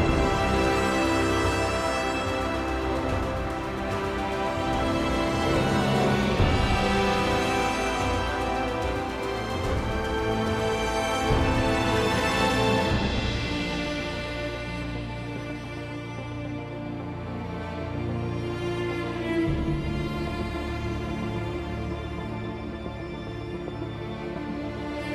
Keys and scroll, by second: 13.7-14.9 typing, 24.5 1.